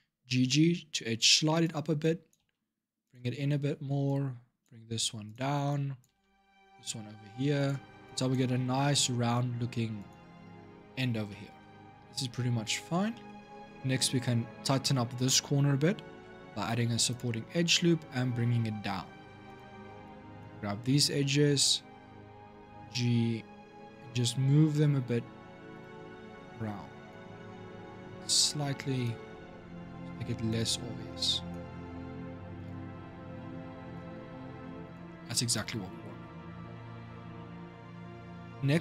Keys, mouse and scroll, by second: 1.8 click, 2.2 g, 3.8 click, 4.5 g, 5.5 click, 5.8 g, 7.8 click, 8.2 g, 10.7 scroll down 2, 11.1-13.3 shift+middle drag, 13.3 scroll up 2, 15.9 ctrl+r, 19.8 click, 22.1 g, 26.3 click, 27.0 g, 28.6 click, 28.9 g, 30.9 click, 31.4 g, 33.1 click, 33.8 g, 35.3 click.